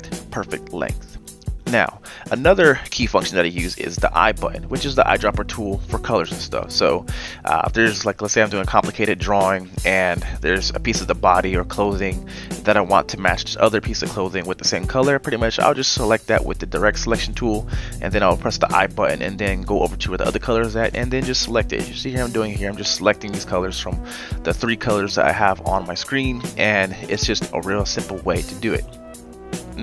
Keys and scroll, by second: 5.4 i, 8.4 v, 8.8 v, 10.4 i, 13.7-14.5 typing, 15.6 i, 18.2 v, 20.0 i, 25.1 v.